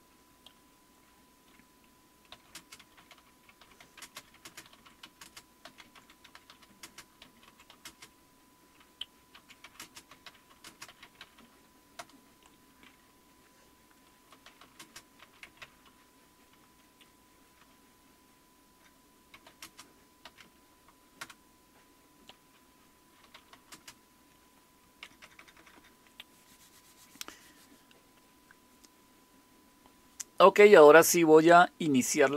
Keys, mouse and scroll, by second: 2.3-12.5 typing, 14.1-20.9 typing, 21.2 Return, 23.0-26.1 typing.